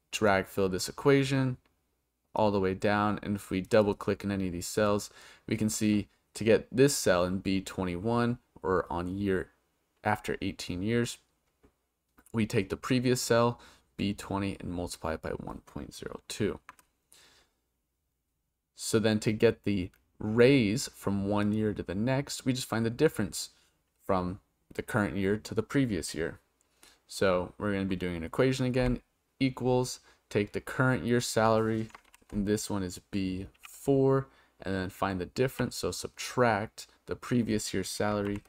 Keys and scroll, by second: 28.8 =, 32.1 shift+b, 33.6 4, 35.5 -, 38.3 shift+b.